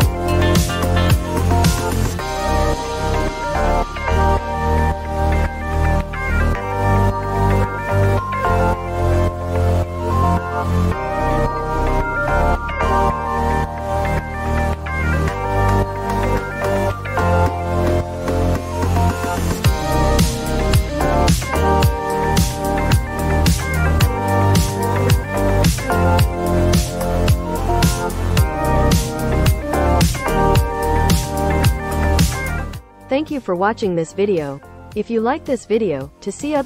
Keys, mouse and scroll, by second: 1.4 click, 4.7 click, 7.5 click, 28.4 click.